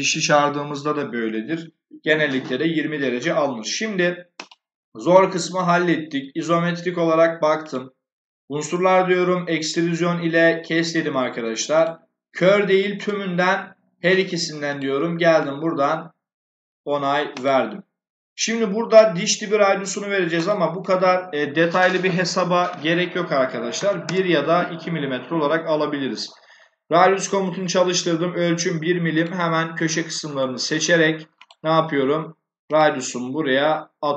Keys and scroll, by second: 23.7 1, 23.9 Return.